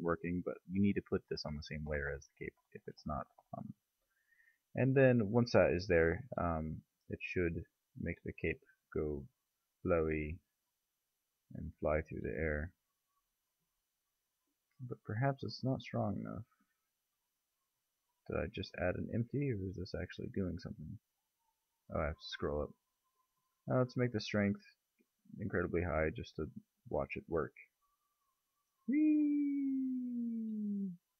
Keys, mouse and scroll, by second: 3.1-4.5 middle drag, 5.2-6.2 drag, 9.7 r, 12.7-13.5 middle drag, 13.7 middle click, 14.0 middle click, 16.1 click, 19.9 click, 23.1-24.1 middle drag, 24.1 click, 26.9-28.2 drag, 30.9-31.1 middle drag.